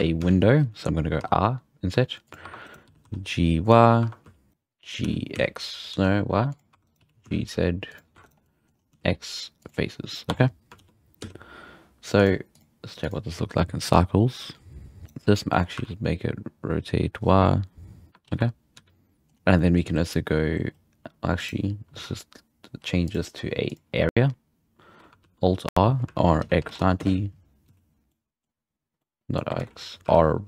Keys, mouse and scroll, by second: 0.1 z, 1.1 i, 2.4 2, 2.6 right click, 2.8 g, 3.9 2, 4.2 z, 4.5 right click, 5.0 g, 6.7 2, 6.8 right click, 6.9 g, 8.1 3, 8.3 right click, 8.3 scroll down 1, 8.4 middle click, 8.7-9.7 scroll up 3, 8.9 x, 10.3 Tab, 10.3-10.7 scroll down 1, 10.7 alt+a, 11.1 z, 12.1 click, 12.5-15.0 drag, 15.0 right drag, 15.3-15.8 middle drag, 15.8 r, 17.7-18.3 scroll up 3, 18.3 alt+a, 18.7 z, 18.9 scroll down 1, 19.1 middle drag, 19.3 scroll up 1, 19.5-20.1 middle drag, 21.2 scroll up 1, 21.4-22.5 right drag, 23.1 drag, 23.7 click, 25.3 alt+r, 26.1 r, 27.7 z, 28.4-29.6 middle drag, 29.6 ctrl+z, 30.1 r.